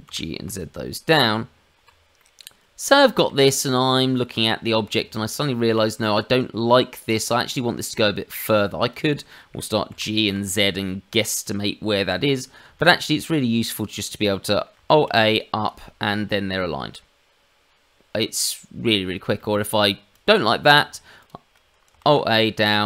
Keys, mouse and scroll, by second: 0.0 g, 1.3 Tab, 2.1 middle click, 4.3 click, 4.9 Tab, 5.9 middle click, 8.5 click, 9.2 middle click, 9.8 g, 12.7 shift+middle click, 13.7 shift+click, 14.9 alt+a, 19.4 shift+middle click, 20.1 click, 21.2 shift+click, 22.0 alt+a.